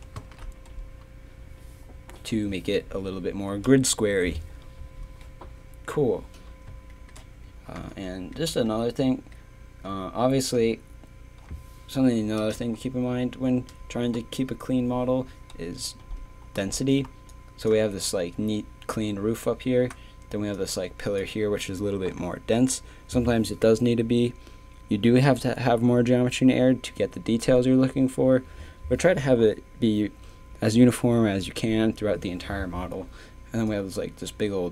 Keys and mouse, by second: 0.3 shift+c, 6.9-11.9 middle drag, 17.1 d, 17.3-20.2 drag.